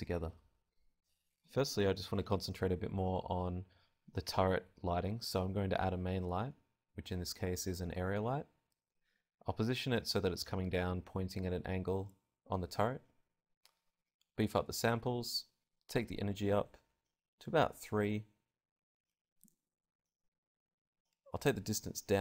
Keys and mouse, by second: 0.0 Escape, 0.0 click, 0.6 click, 1.2 click, 1.6 shift+a, 2.7 g, 2.8 click, 3.7 n, 3.8 g, 4.8 click, 5.0 g, 6.1 click, 6.5 g, 7.8 click, 7.8 r, 8.2 r, 9.7-10.7 drag, 10.7-12.5 middle drag, 12.5-18.8 drag.